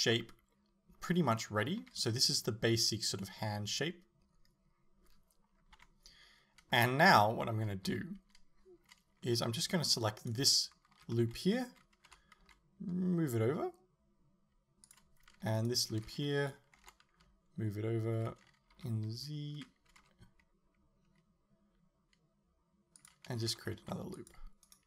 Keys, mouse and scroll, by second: 1.8 z, 5.8 KP_7, 7.9 z, 10.3 alt+right click, 12.1 g, 15.0 click, 15.6 alt+right click, 16.9 g, 23.1 click, 23.6 ctrl+r, 24.8 right click.